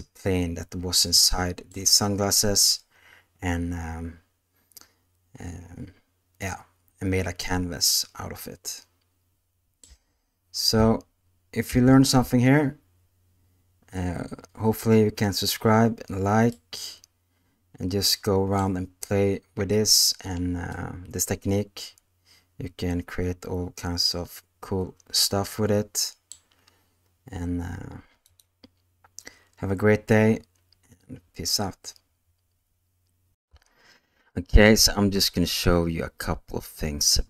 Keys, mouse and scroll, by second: 1.1-1.8 middle drag, 2.7 scroll up 1, 2.7-9.8 middle drag, 9.8 space, 11.7 ctrl+z, 16.5-18.6 middle drag, 20.7-24.0 middle drag, 25.2-26.3 middle drag, 28.2 click, 33.4 q.